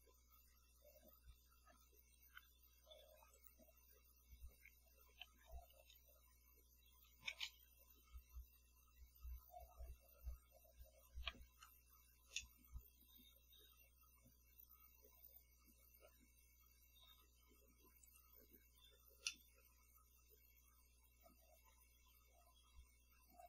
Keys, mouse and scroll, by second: 3.5 click, 5.4 /, 5.6 2, 5.9 Return, 7.5 BackSpace, 11.3 Up, 12.5-16.4 middle drag, 16.4-18.2 scroll up 1, 18.2 click, 19.4-22.0 middle drag, 22.0-23.4 scroll up 1.